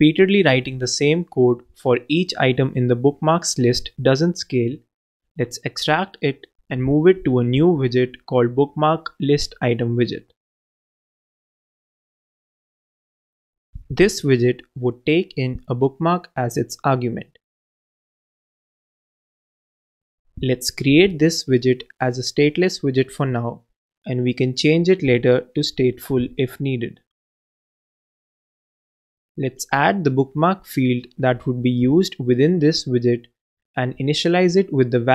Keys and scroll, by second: 6.9 shift+super+x, 7.1 shift+super+x, 7.5 shift+super+b, 7.7-11.3 typing, 13.5 super+Down, 13.8 super+BackSpace, 15.7 super+Up, 16.1 super+d, 16.5 super+Right, 17.5 super+Left, 22.2 alt+Return, 25.5-26.5 typing, 29.3 alt+Return, 31.3 super+Down, 31.4 super+BackSpace, 33.3 super+v.